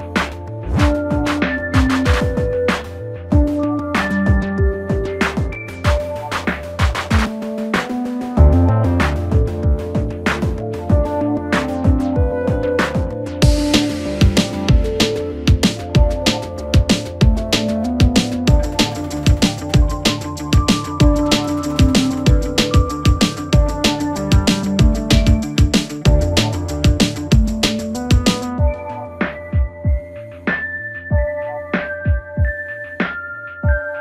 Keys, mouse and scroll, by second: 2.7-3.2 scroll up 1, 3.2-4.6 shift+middle drag, 4.6 click, 5.5 g, 9.1-9.7 scroll down 3, 9.7 shift+middle click, 10.1-10.7 scroll up 5, 10.7 shift+middle click, 12.0 click, 12.5 shift+click, 13.3 g, 16.5-16.9 scroll down 2, 16.9-17.4 shift+middle drag, 17.4-18.0 scroll up 2, 18.0 click, 18.5 shift+click, 19.4 g, 21.5-22.2 scroll down 3, 22.2-22.6 scroll up 2, 22.6 shift+middle click, 23.0-24.1 scroll up 4, 24.1 click, 25.0 g, 28.5-29.2 scroll down 5, 29.2 Tab, 29.5-30.2 scroll down 1, 30.2 KP_1, 32.9-34.0 scroll down 2.